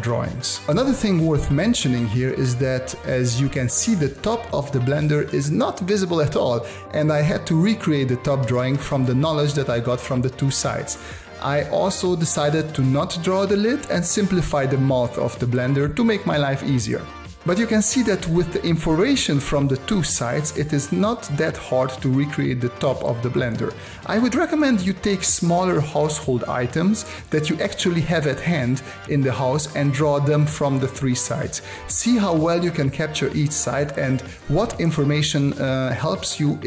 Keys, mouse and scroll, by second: 0.9 shift+click, 1.9 space, 5.0 space, 7.0 space, 7.7 space, 8.4 space, 9.6 space, 10.5 space, 11.5 space, 16.2 space, 17.7 space, 21.9 shift+click, 24.6 s, 24.8 s, 25.6 space, 26.5 space, 31.7 space, 32.1 space, 34.3 space, 36.1 space.